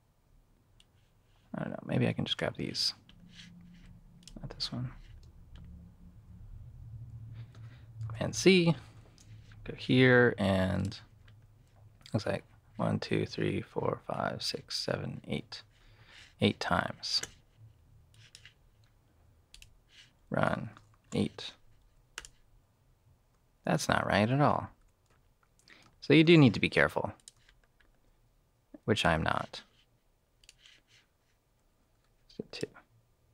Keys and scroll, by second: 7.9 super+c, 21.0 8, 24.6 super+z, 31.9 2.